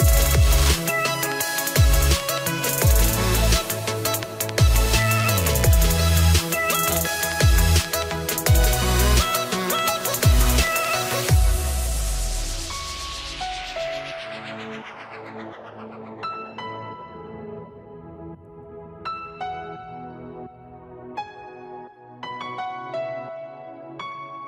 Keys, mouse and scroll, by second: 2.6 click, 3.6 scroll, 3.9 click, 5.5 click, 6.5-6.9 scroll, 7.3 click, 12.2 click, 17.1 scroll, 17.9 click, 19.1 scroll, 19.8-20.5 scroll, 20.5 click.